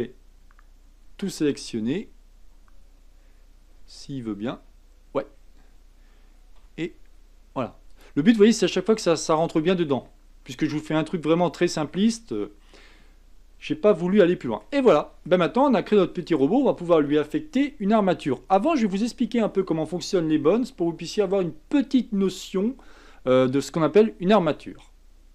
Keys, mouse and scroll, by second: 3.2-4.6 scroll up 5, 4.6 l, 5.3 scroll down 1, 6.6 g, 8.2-9.0 scroll down 7, 9.0-12.0 middle drag, 14.1-15.9 shift+middle drag, 15.9 KP_1.